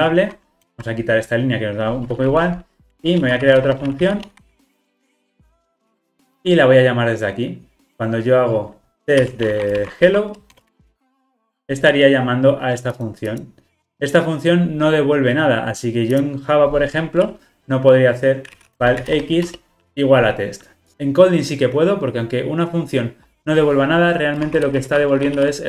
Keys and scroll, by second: 0.7 super+BackSpace, 5.7 alt+super+l, 6.1 ctrl+alt+o.